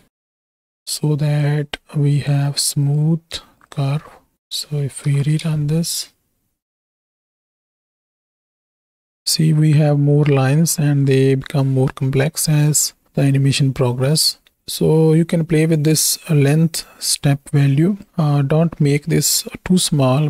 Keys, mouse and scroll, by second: 0.8 drag, 1.5-2.3 drag, 2.8-3.7 drag, 4.9 shift+Right, 5.1 shift+Left, 5.4 space, 16.0-18.0 drag, 18.8 middle drag.